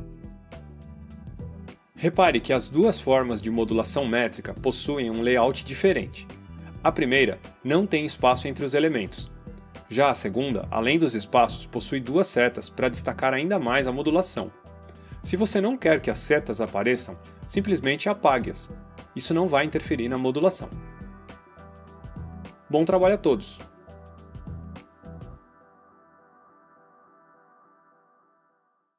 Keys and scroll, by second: 18.6 BackSpace, 20.5 BackSpace.